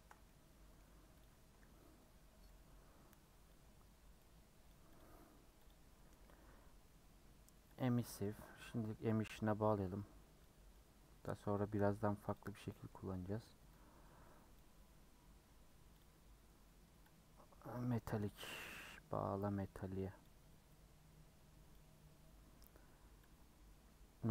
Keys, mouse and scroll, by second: 2.4 click, 4.2-8.2 drag, 10.5-18.2 drag, 20.3-24.3 drag.